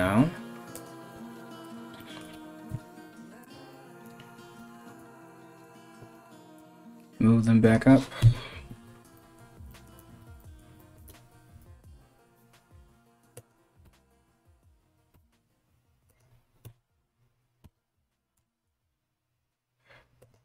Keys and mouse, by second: 0.8 s, 1.9 g, 4.2 f, 4.6 z, 5.8 g, 7.8 KP_3, 11.2 s, 13.4 f, 14.8 g, 16.3 KP_1, 17.3 g.